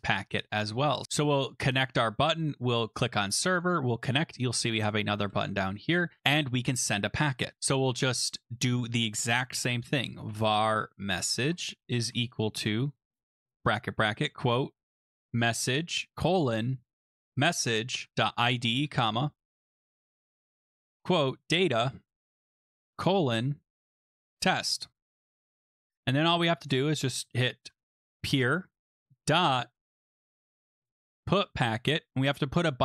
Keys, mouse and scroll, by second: 0.1 click, 1.0 click, 1.8 click, 2.0 click, 2.8 click, 3.7 click, 4.9 click, 5.4 Return, 8.0-9.3 drag, 9.7-24.8 typing, 13.1 Return, 18.9 Return, 19.9-21.2 Return, 25.0-25.8 scroll, 25.8 click, 26.1 Return, 27.6-28.6 typing, 28.8 Tab, 29.7-31.4 typing.